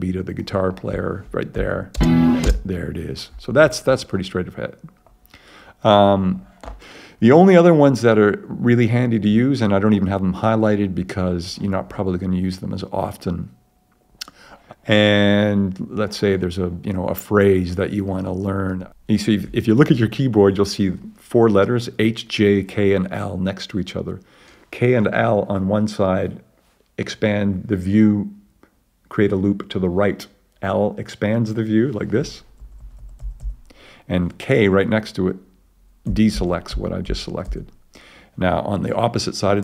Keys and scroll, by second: 1.6 ], 1.9 space.